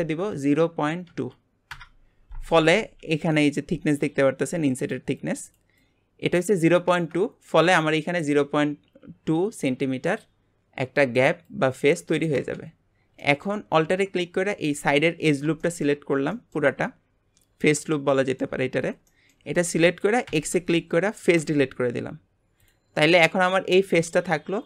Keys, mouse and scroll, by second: 7.6-10.1 scroll up 1, 12.8-13.2 scroll up 1, 13.2 shift+middle click, 13.7-14.5 scroll up 1, 14.5 alt+click, 15.2 scroll down 4, 15.6 shift+middle click, 16.3-18.6 shift+middle drag, 18.6-19.0 scroll up 1, 19.0 shift+middle click, 19.5-20.2 scroll up 3, 20.2 x, 21.9-22.6 scroll down 1, 22.6 click, 22.9-23.2 scroll down 4, 23.2 middle click, 23.7 g.